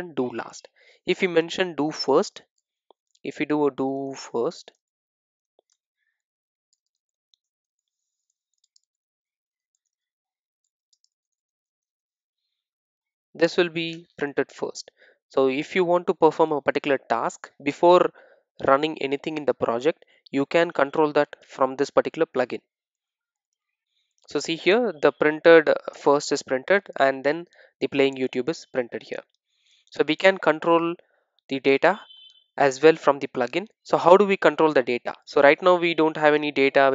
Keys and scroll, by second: 8.6 Return.